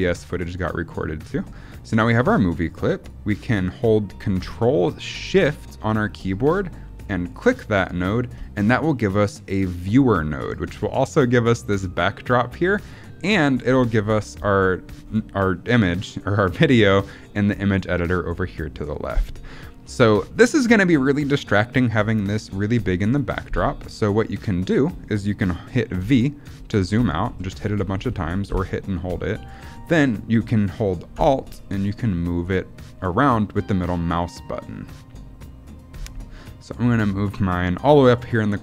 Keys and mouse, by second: 2.1-3.0 drag, 25.9-29.0 typing, 31.6-38.6 alt+drag.